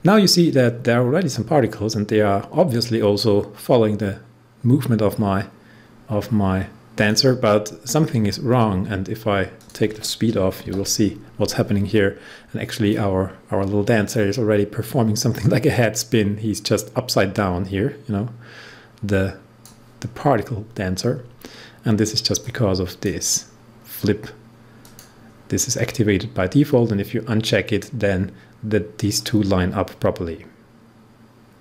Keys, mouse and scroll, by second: 1.2 click, 1.3-9.5 drag, 10.6 0, 12.8-22.0 drag, 22.3-24.8 drag, 29.1-31.6 drag.